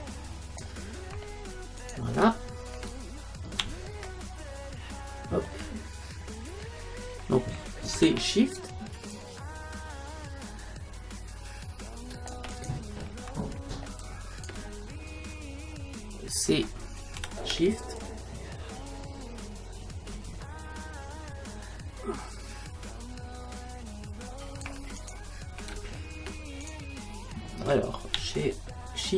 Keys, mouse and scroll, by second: 1.9-3.7 right drag, 2.4 space, 4.1-11.2 middle drag, 8.0 c, 12.7-14.5 right drag, 13.2-16.9 middle drag, 13.7 space, 17.2 c, 25.7 space, 26.6-28.5 right drag, 28.7 middle click.